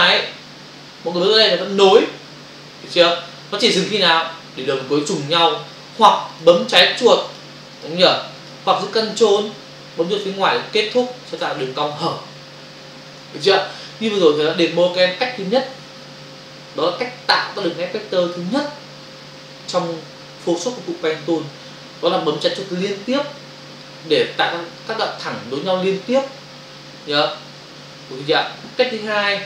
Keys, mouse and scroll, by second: 1.9 click, 2.0 click, 5.3 click, 5.4 click, 6.2 click, 6.4 click, 6.8 click, 6.9 click, 7.3 click, 7.4 double click, 7.7 click, 8.3 click, 8.5 double click, 10.9 ctrl+click, 11.0 ctrl+click.